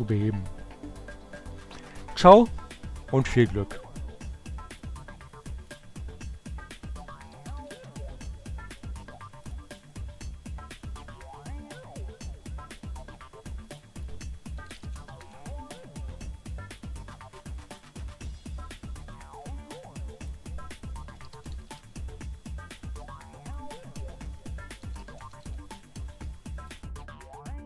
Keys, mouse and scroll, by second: 3.7-5.2 drag, 6.0-7.4 typing, 8.7 click, 10.1 click, 12.9 click, 13.7-14.8 typing, 15.6 click, 16.7 click, 18.8 click, 19.5 click, 19.9-21.2 typing, 22.2 click, 23.7-25.1 typing, 25.7 click.